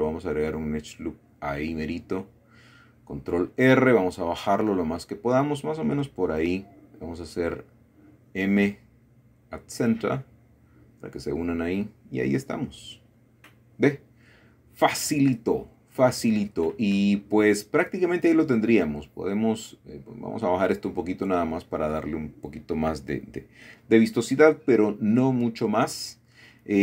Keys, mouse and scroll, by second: 2.7 click, 3.1 click, 4.1 click, 4.4 middle click, 6.1 click, 6.7 shift+click, 9.1-10.1 drag, 10.5-11.4 scroll down 1, 11.8 click, 12.4-12.7 scroll down 2, 12.7-15.9 middle drag, 16.3 shift+click, 18.0-18.8 typing, 23.7 shift+click, 24.4 shift+click, 24.7 click, 25.7 click.